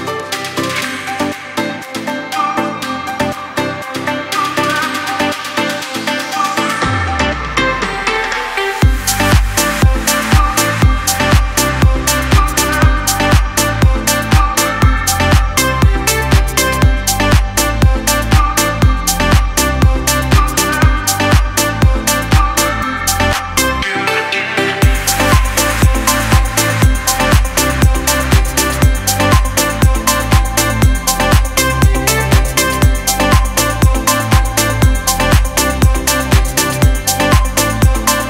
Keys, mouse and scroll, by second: 0.5-2.1 typing, 1.8 click, 1.9 click, 3.2-4.0 typing, 6.7 typing, 8.4 alt+right click, 9.0-9.6 typing, 9.3 click, 13.7 typing, 14.8 click, 16.3 ctrl+l, 18.1-27.1 drag, 27.9 alt+scroll up 1, 28.5-33.2 drag, 35.3 ctrl+l, 37.3-38.2 drag, 37.3 typing.